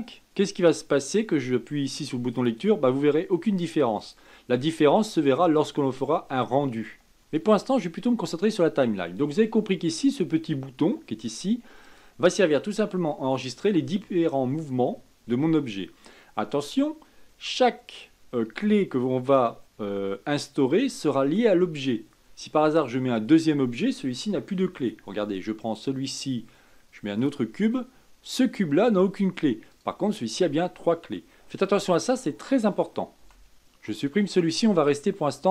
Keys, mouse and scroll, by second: 0.1-8.7 drag, 11.8 click, 24.6 shift+a, 29.7 click, 31.8 click, 33.2 Delete, 35.4 click.